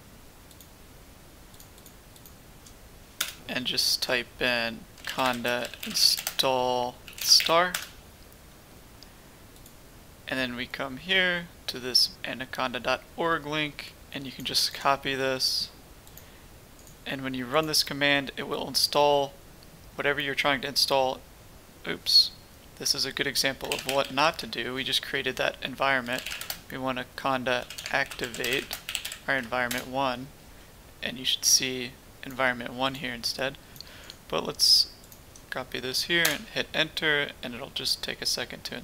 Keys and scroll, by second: 3.2 BackSpace, 4.7-7.9 typing, 23.7 ctrl+c, 23.8 ctrl+c, 24.0 ctrl+c, 24.1 …, 26.0 ctrl+c, 26.0-30.2 typing, 36.2 Return.